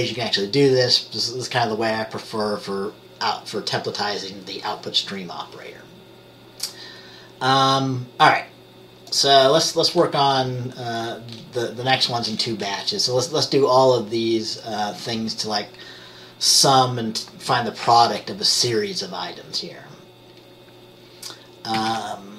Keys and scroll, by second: 21.9 ctrl+c.